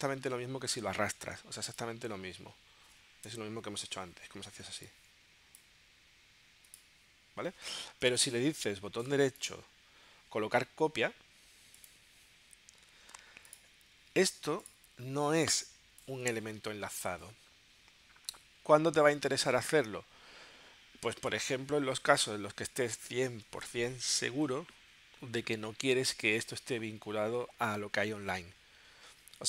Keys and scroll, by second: 3.4 BackSpace, 8.2 BackSpace.